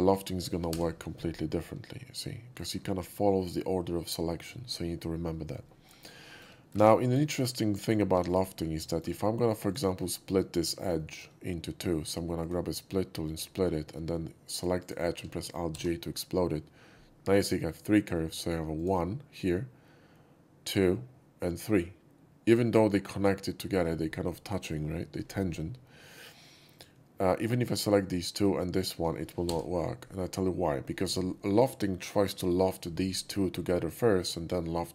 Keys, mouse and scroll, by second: 0.6 l, 1.4-2.5 middle drag, 5.6 middle drag, 6.2 shift+middle drag, 7.2 ctrl+shift+z, 7.2 middle click, 7.7 click, 8.0 x, 8.2 click, 8.5 middle drag, 8.8 shift+middle click, 9.6 shift+click, 10.2 shift+middle click, 10.9 shift+middle drag, 12.3 shift+click, 13.2 shift+click, 14.5 click, 14.7 click, 18.3 alt+j, 18.7 click, 26.7 click, 27.7 shift+click, 28.7 shift+click, 29.4 l.